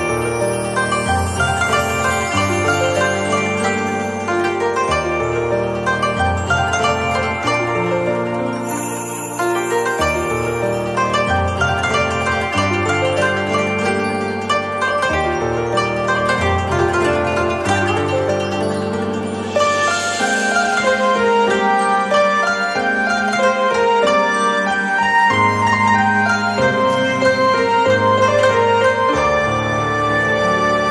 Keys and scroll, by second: 12.6 z, 13.5 space, 17.6 z, 18.5 space, 19.5 z, 20.4 space, 24.4 z.